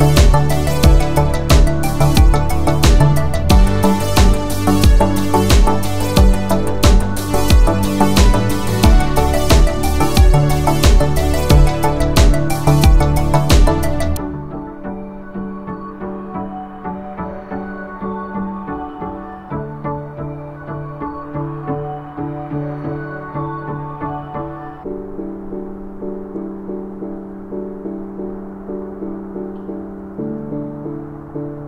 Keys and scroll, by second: 0.9-1.6 typing, 6.8 space, 7.2 x, 16.0 space.